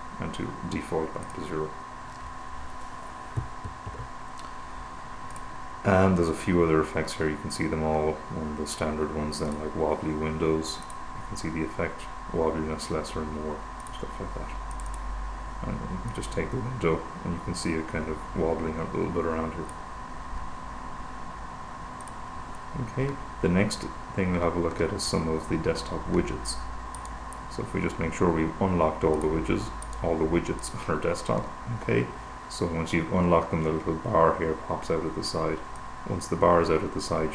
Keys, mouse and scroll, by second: 1.7 click, 4.1 super+0, 5.7 click, 7.2-7.9 scroll down 2, 7.9-8.4 scroll down 1, 8.4-8.9 scroll down 1, 9.1-9.6 scroll down 2, 9.9 click, 11.2 click, 14.2 click, 15.2 click, 16.6-20.7 drag, 22.6 click, 26.9-28.1 right drag, 29.4 click, 30.2 right click, 31.1 click, 36.2-37.3 drag.